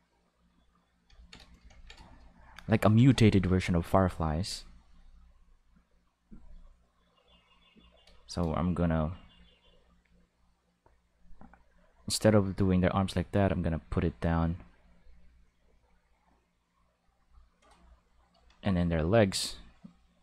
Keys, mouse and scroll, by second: 3.5 ctrl+click, 4.4 ctrl+click, 4.8 ctrl+click, 4.9 ctrl+click, 5.3 ctrl+click, 6.3 ctrl+click, 6.7-7.9 ctrl+drag, 9.1 click, 9.3 click, 9.5 click, 10.1 click, 11.0 click, 11.5 click, 12.4 click, 13.6 click, 13.7 click, 14.3 click, 14.9 click, 15.2 click, 15.7 click, 18.8-20.1 ctrl+drag.